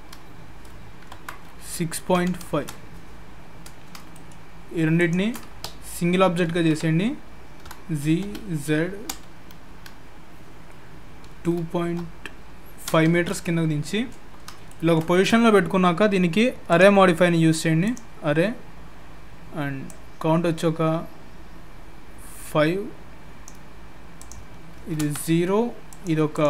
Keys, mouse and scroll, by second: 3.2-3.9 scroll up 3, 4.1 shift+middle click, 5.0 shift+click, 6.5 ctrl+j, 7.6 g, 14.7 shift+middle click, 16.7 click, 19.9 click, 24.2 click, 25.9 click, 26.3 click.